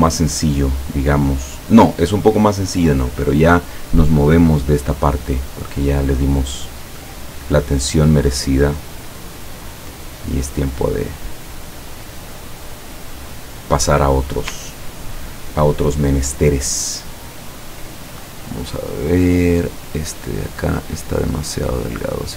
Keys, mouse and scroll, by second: 0.8 click, 1.4 click, 5.8 click, 7.4 click, 9.7 click, 10.8 click, 13.3 click, 14.7-15.3 ctrl+scroll down 4, 16.3-16.9 ctrl+scroll up 2, 17.3 ctrl+scroll down 2, 19.1 click, 19.7 click, 21.2-22.3 drag.